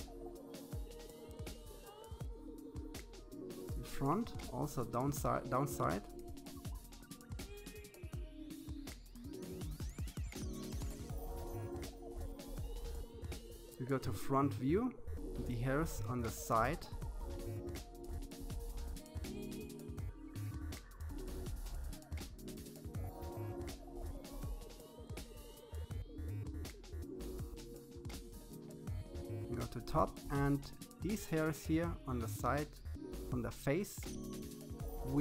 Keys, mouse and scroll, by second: 0.6 scroll up 1, 0.9-2.5 drag, 3.4-5.0 shift+middle drag, 5.6-7.2 drag, 8.2-9.6 scroll down 4, 9.6 KP_3, 11.8 KP_1, 12.8-14.3 shift+middle drag, 14.3-14.7 scroll up 2, 15.7 shift+middle click, 16.5-16.8 scroll down 1, 16.8-18.3 shift+middle drag, 18.9-20.5 drag, 22.1-23.6 drag, 24.3-27.2 shift+middle drag, 27.2 KP_7, 29.2-30.7 drag, 33.4-34.3 scroll down 2, 34.3-35.2 middle drag.